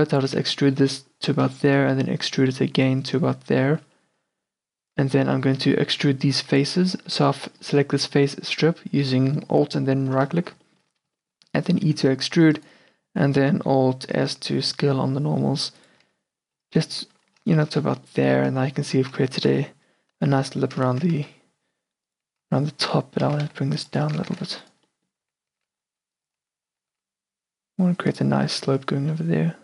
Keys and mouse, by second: 0.7-3.2 middle drag, 1.6 e, 3.3 middle click, 5.3 middle click, 6.1-8.4 middle drag, 10.2 middle click, 10.9 middle click, 12.4 e, 14.3 alt+s, 16.1 a, 16.8 Tab, 17.7 middle click, 18.2-18.9 middle drag, 18.9 q, 20.6 Tab, 21.3 z, 22.4 click, 22.6-24.3 typing, 25.0 middle click, 25.4-27.0 typing, 26.4 click, 28.4 a, 28.8 Tab.